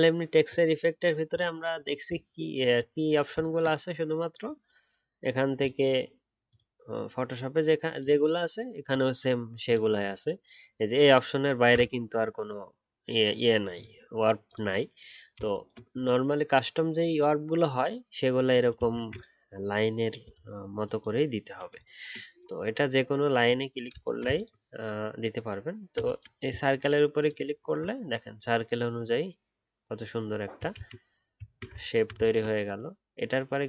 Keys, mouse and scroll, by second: 18.9 ctrl+z, 24.3 ctrl+click, 24.3 z, 27.5 alt+scroll down 1, 30.7 ctrl+z, 31.8 alt+scroll up 2, 32.3 ctrl+click.